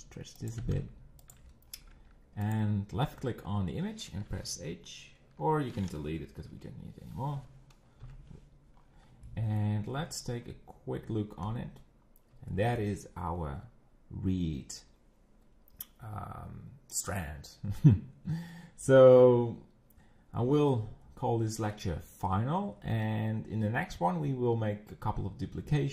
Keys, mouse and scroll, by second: 0.6 g, 1.8 scroll up 6, 2.0 Tab, 2.5 click, 6.5 Delete, 8.0 KP_1, 8.8 scroll up 8, 9.3-10.8 shift+middle drag, 10.8 z, 11.4-12.3 scroll up 4, 12.5 shift+middle click, 13.4-14.6 scroll down 2, 20.7-25.9 shift+middle drag.